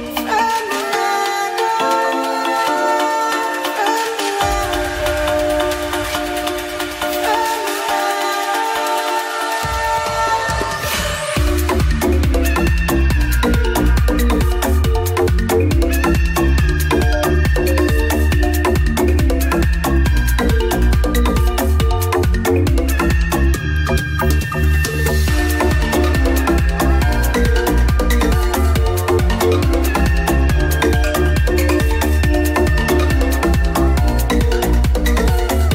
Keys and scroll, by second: 0.2 [, 2.3 [, 2.4 ], 4.9 ], 5.4 ctrl+alt+z, 23.5 ctrl+s, 31.9 ctrl+s.